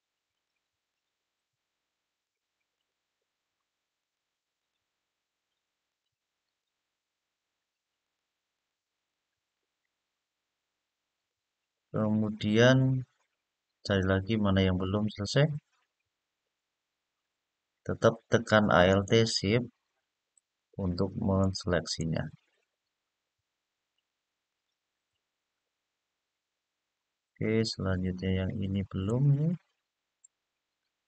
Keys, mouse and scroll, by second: 0.0 alt+shift+click, 0.7 alt+shift+click, 2.0 alt+shift+click, 2.5 alt+shift+click, 3.7 alt+shift+click, 4.3 alt+shift+click, 5.6 alt+shift+click, 6.2 alt+shift+click, 7.8 alt+shift+click, 8.3 alt+shift+click, 11.3-11.7 scroll down 3, 12.6-14.7 middle drag, 15.1-16.1 scroll up 2, 16.2 scroll up 1, 18.6 alt+shift+click, 19.7 alt+shift+click, 20.3 alt+shift+click, 21.1 alt+shift+click, 21.6 alt+shift+click, 23.6 alt+shift+click, 24.2 alt+shift+click, 25.1-25.6 scroll down 2, 26.7-28.3 middle drag, 28.8-29.9 middle drag, 30.5-31.0 middle drag.